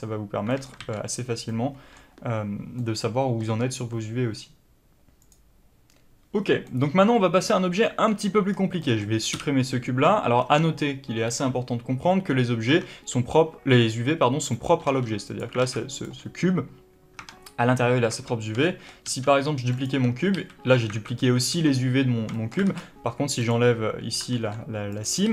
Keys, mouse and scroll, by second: 0.4 middle click, 0.7 ctrl+z, 1.4 middle click, 6.6 middle click, 7.2 Tab, 7.7 middle click, 8.4-15.3 middle drag, 8.4-8.7 scroll down 1, 9.2 x, 15.3 click, 15.5 alt+a, 15.6 scroll down 1, 15.8 click, 17.1 Tab, 18.3 scroll down 1, 18.5-19.7 shift+middle drag, 18.9 shift+d, 19.7 click, 19.8 Tab, 22.2-23.3 shift+middle drag, 22.5 alt+a, 22.7-23.0 scroll up 2, 23.0 2, 23.3 click, 24.2 ctrl+e, 25.2 a.